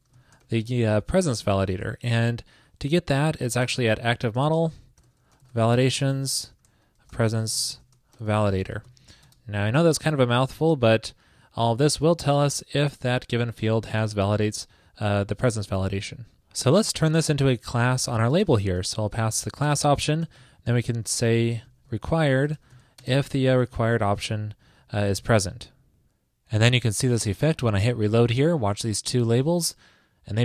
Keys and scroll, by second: 10.7 super+Right, 12.1 super+Left, 17.3 super+Right, 24.8 super+Right, 25.2 super+s, 28.7 super+r.